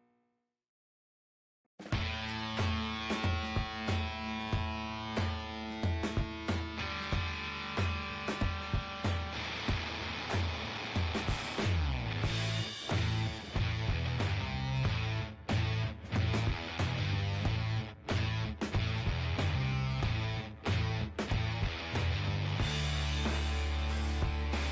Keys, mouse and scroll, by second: 2.3 KP_1, 3.5 g, 4.8 middle click, 5.7 g, 5.8-8.3 middle drag, 7.0-8.3 drag, 8.3 g, 9.3-10.5 right drag, 9.5 g, 11.2-12.6 middle drag, 13.0-14.9 right drag, 13.3 g, 14.5 KP_1, 15.2 middle click, 15.8-17.1 drag, 17.1 right click, 17.6 o, 18.1 g, 19.7 o, 20.3 g, 24.2-24.7 right drag, 24.4 g.